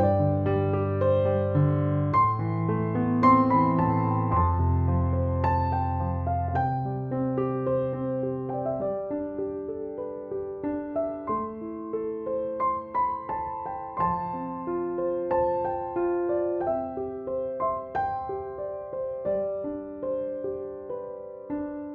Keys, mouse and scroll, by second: 4.9 right click, 6.0-9.6 drag, 11.5-12.2 ctrl+click, 12.4-13.6 ctrl+alt+drag, 14.8 ctrl+z, 16.0 click, 19.7 ctrl+click, 20.4 ctrl+g, 21.2 click.